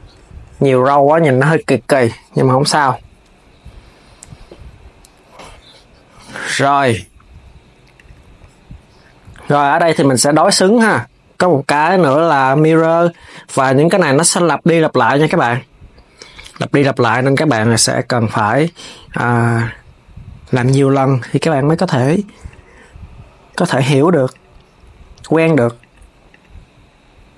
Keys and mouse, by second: 2.5 s, 7.7 click, 9.3-13.6 drag, 14.9 click, 17.4 click, 18.8 click, 20.2-23.3 drag, 24.0 click, 26.0 click.